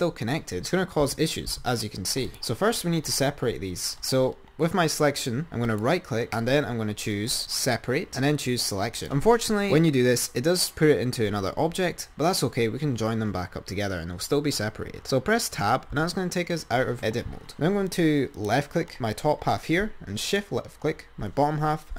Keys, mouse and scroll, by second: 1.3 r, 5.9-8.3 right drag, 16.2 Tab, 18.1 click, 18.5 click, 20.4 shift+click.